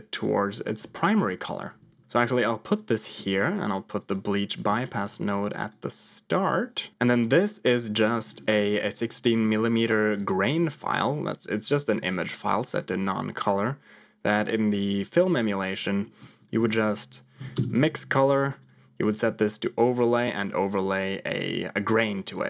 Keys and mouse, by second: 0.7-2.1 typing, 2.1 alt+p, 3.3 middle click, 4.1 click, 4.6 middle click, 4.9 g, 6.9 click, 7.3 click, 7.5 click, 8.8 middle click, 9.8 click, 11.2 click, 12.9-14.3 middle drag, 15.2 middle click, 16.0 middle click, 16.3 click, 16.4 shift+a, 19.0 click, 20.5 click.